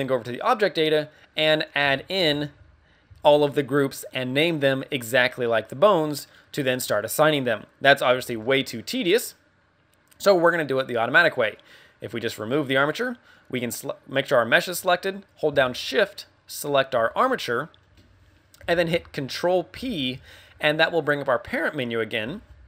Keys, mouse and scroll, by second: 0.2 click, 1.6 click, 1.8 a, 2.1 a, 3.0 a, 3.0 a, 6.0 middle click, 6.7 scroll up 2, 7.1 middle click, 8.3 middle click, 10.2 click, 16.5 shift+right click, 17.3 middle click, 19.6 ctrl+p.